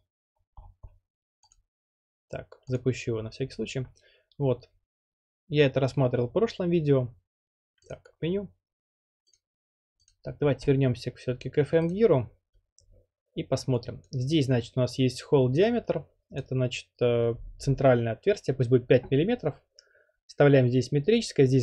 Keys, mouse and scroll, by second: 0.5 scroll, 0.7 scroll down 11, 0.9-1.5 scroll, 1.5 click, 2.8 click, 3.8 click, 7.9-9.0 drag, 9.3-11.1 drag, 11.9-12.9 drag, 14.1-15.1 drag, 16.4 click, 17.5 5.